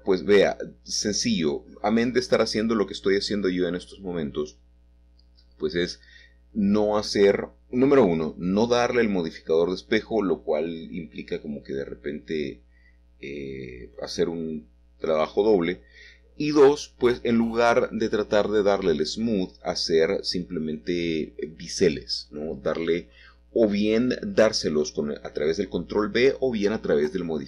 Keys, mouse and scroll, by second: 0.6 shift+click, 4.8 click, 5.5-7.4 middle drag, 7.8 click, 8.7 shift+click, 10.9 click, 11.6-13.6 middle drag, 14.3 Tab, 15.5-17.2 middle drag, 18.2-19.8 drag, 20.1-21.8 middle drag, 23.4-24.5 scroll up 4, 24.5-25.3 scroll down 3, 24.8 middle click.